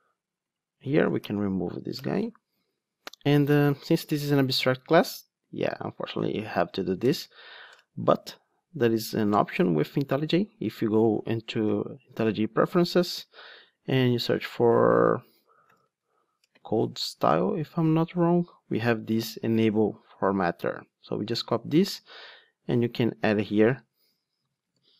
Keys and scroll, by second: 1.2 alt+Return, 21.4 super+c, 24.0 Tab, 24.7 super+v.